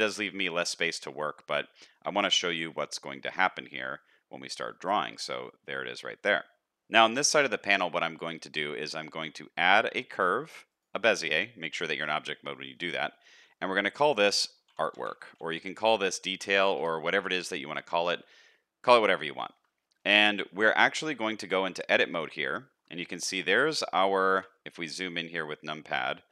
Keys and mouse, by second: 1.2 shift+middle drag, 1.9 middle click, 2.6 shift+middle click, 2.9 middle click, 3.5 shift+middle click, 3.9 middle click, 4.6 shift+middle click, 5.0 middle click, 7.4 shift+middle drag, 7.9 middle click, 8.7 shift+a, 12.5 shift+middle click, 16.0-19.6 shift+drag, 19.7 shift+middle click, 20.2 middle click, 21.2 Tab, 21.9 shift+middle click, 23.1 shift+middle click, 25.5 middle click, 26.2 shift+middle click.